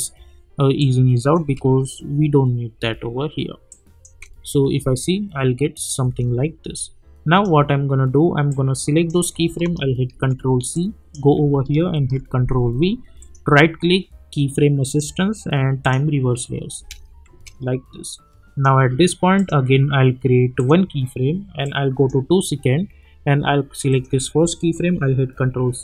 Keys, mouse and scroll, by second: 7.0-10.0 drag, 10.0 ctrl+c, 10.7 click, 11.9 ctrl+v, 13.2 right click, 14.8 click, 16.7 space, 18.1-23.9 drag, 25.4 ctrl+c.